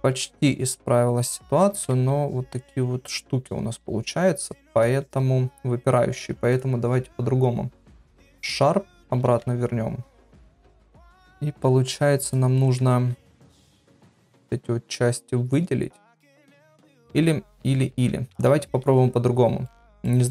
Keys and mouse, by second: 2.0 Tab, 4.9 Tab, 6.5-8.5 drag, 9.3 Tab, 10.4 click, 10.8 middle click, 14.2 middle click, 17.9 ctrl+z, 18.4 Tab, 19.6 middle click.